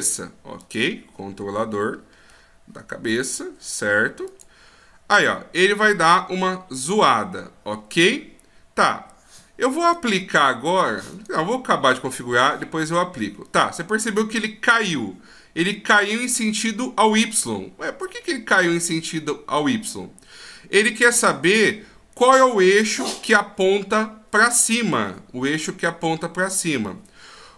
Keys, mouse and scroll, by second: 0.6 click, 9.8 right click, 11.1 right click.